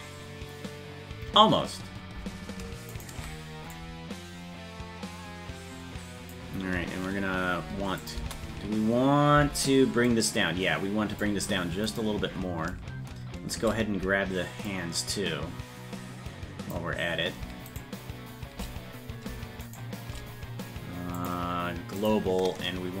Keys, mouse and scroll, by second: 3.1 shift+right click, 3.8-6.3 drag, 8.0 click, 10.1-11.2 drag, 12.1 right click, 14.7-16.7 drag, 17.9 shift+right click, 19.7 shift+right click, 21.2-22.2 drag.